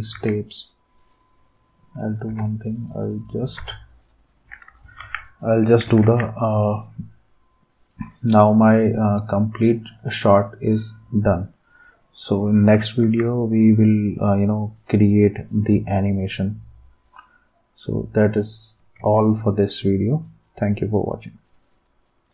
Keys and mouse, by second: 0.1 ctrl+s, 2.3 space, 3.5 space, 5.0 ctrl+s, 6.0 ctrl+s, 13.0 ctrl+s, 19.0 ctrl+s.